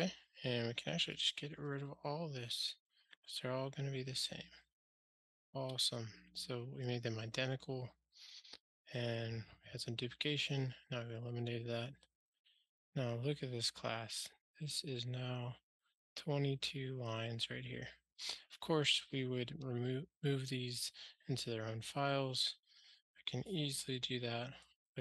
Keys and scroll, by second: 1.6 super+BackSpace, 4.9 ctrl+alt+shift+r, 5.9 alt+super+l, 24.9 F6.